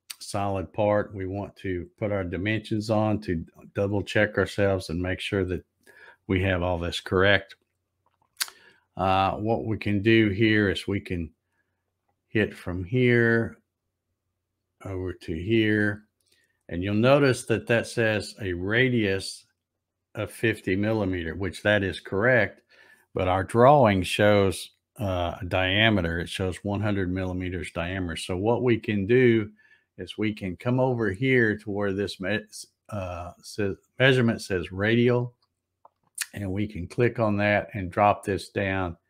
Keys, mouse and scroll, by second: 3.9 click, 11.8 click, 14.7 click, 19.7 click, 35.8 click, 37.2 click.